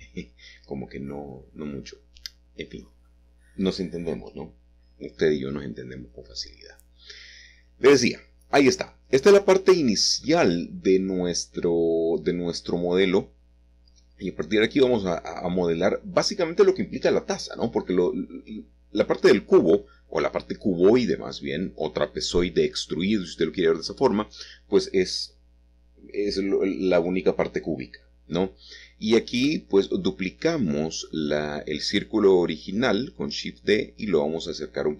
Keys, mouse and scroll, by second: 0.1-1.0 scroll up 2, 2.9-4.7 scroll up 2, 5.2 e, 9.1 click, 14.0 click, 19.2 Escape, 20.2 s, 22.5 click, 23.5 middle click, 26.3 g, 27.7 x, 30.3 click.